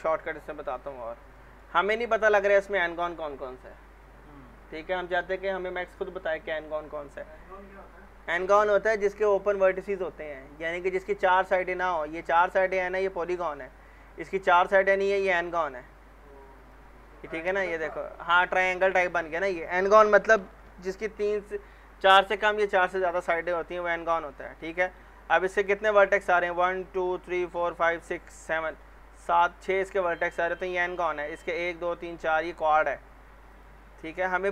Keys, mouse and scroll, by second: 0.7 click, 1.3 middle click, 1.8-3.7 scroll up 1, 11.5 middle click, 12.0 scroll up 1, 12.6 click, 12.6 click, 16.6 click, 18.6 scroll up 1, 32.5 scroll down 1, 33.5 click.